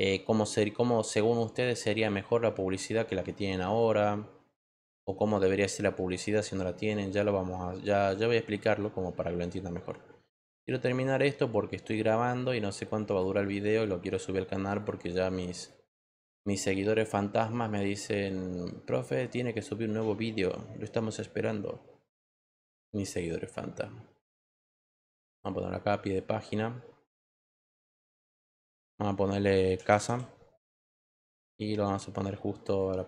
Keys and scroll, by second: 19.9 BackSpace, 29.3-30.5 typing.